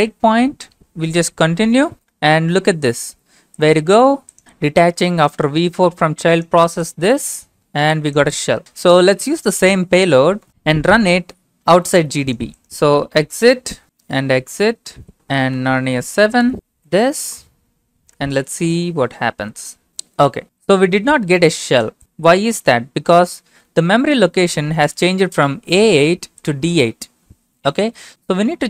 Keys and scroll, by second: 1.4 typing, 1.9 Return, 12.9-17.2 typing, 15.1 Return, 18.1 Return.